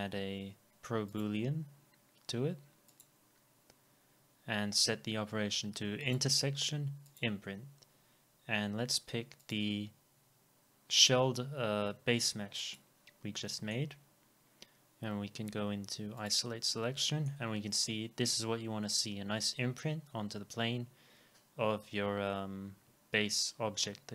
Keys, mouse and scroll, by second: 6.1 double click, 12.8 double click, 13.5 middle click, 16.9-19.3 alt+drag, 17.0 alt+middle click.